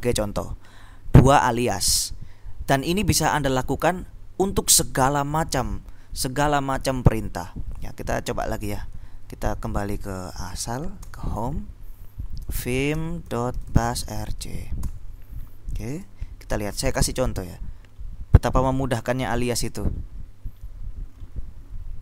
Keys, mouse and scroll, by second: 8.3 Up, 9.1 Down, 9.3 Down, 10.9 c, 11.3 Return, 12.3-14.7 typing, 14.9 Return, 16.1 ctrl+End, 17.8-18.8 scroll up 2, 18.8-22.0 scroll up 3.